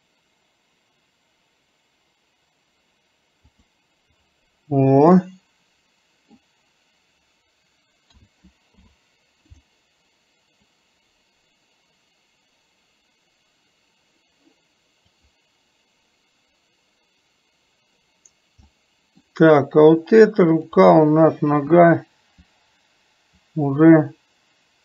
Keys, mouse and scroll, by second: 5.2-6.5 middle drag, 10.8-15.3 drag, 18.7-19.2 middle drag.